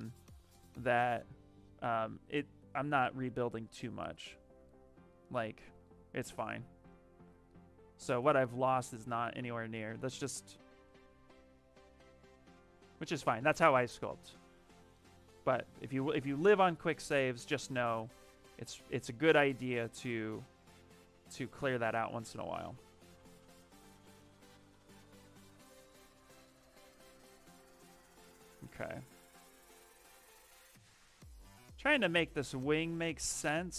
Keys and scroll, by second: 6.7 s, 19.0 s, 31.0 s.